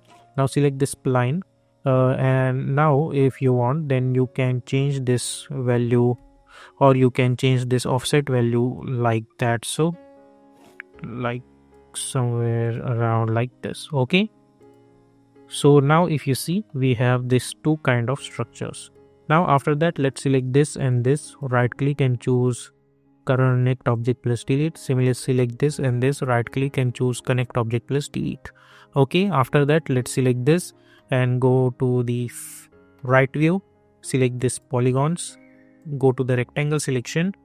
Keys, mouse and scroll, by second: 3.9-6.1 drag, 6.1 ctrl+z, 8.7-12.6 drag, 15.5 scroll down 1, 15.9 middle click, 17.2-18.8 alt+drag, 21.3 right click, 23.9 click, 26.1 right click, 27.2 click, 30.0 click, 30.9 middle click, 34.5 click, 37.0 scroll up 1.